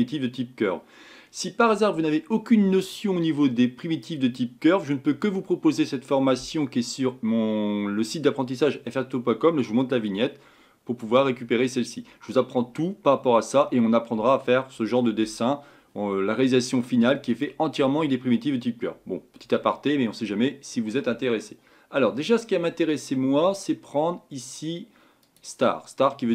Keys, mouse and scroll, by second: 17.3 click.